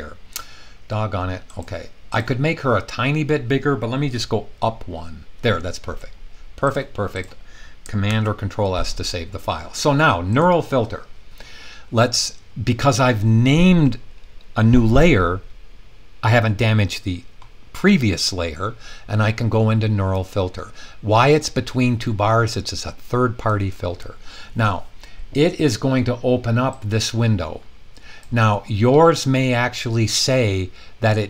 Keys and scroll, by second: 4.5 Up, 8.1 super+s.